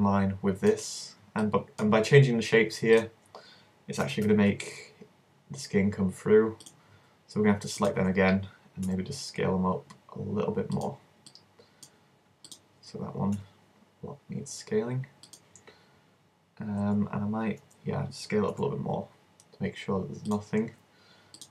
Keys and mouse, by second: 3.0-4.1 middle drag, 4.1-6.7 drag, 4.1 s, 6.8-8.5 drag, 7.9-9.7 middle drag, 8.9 s, 10.9 click, 11.3 middle click, 11.6 click, 12.5 middle click, 13.4-14.5 drag, 13.4 s, 15.4-17.2 drag, 18.5 s, 20.3-21.5 drag.